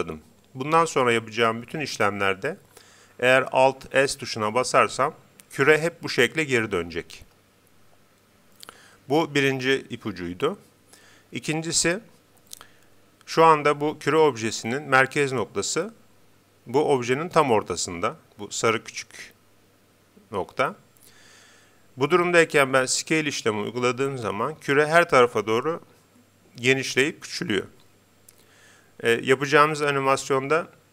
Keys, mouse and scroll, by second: 23.0 s.